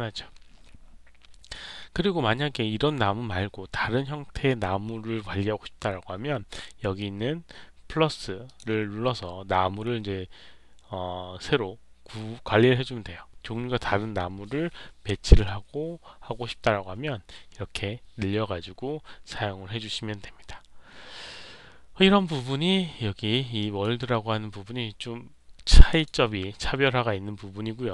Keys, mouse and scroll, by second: 8.4 click, 23.5 click, 25.9 click.